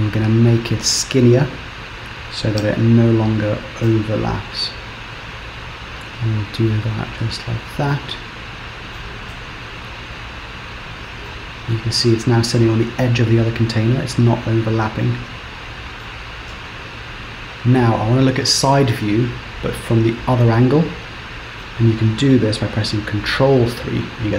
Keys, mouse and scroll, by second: 0.2 click, 2.6 g, 7.6 Tab, 8.0 middle click, 9.4 z, 10.6-11.0 scroll down 4, 11.3 middle click, 17.8 KP_3, 21.7 middle click, 23.3 ctrl+KP_3, 24.2-24.3 scroll up 3.